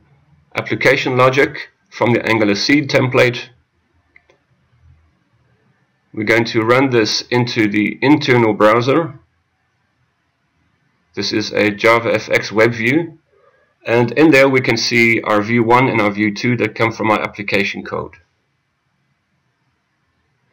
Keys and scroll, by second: 7.2 F6.